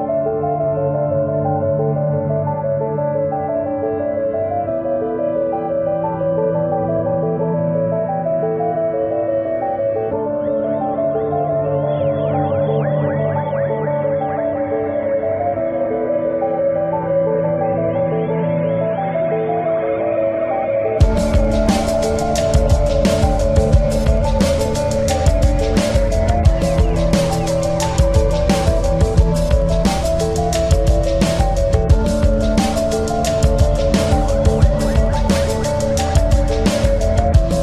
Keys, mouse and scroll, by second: 0.3 e, 1.3 click, 1.7 s, 4.6-8.1 drag, 5.2 e, 6.3 s, 8.7-11.8 drag, 8.9 e, 10.2 s, 12.2-15.4 drag, 12.6 e, 13.9 s, 15.7-17.4 drag, 16.6 e, 17.7-19.4 drag, 17.9 s, 22.8-28.1 drag, 25.6 s, 28.8-30.5 drag, 29.5 e, 30.9-37.6 drag, 34.8 e, 37.1 e.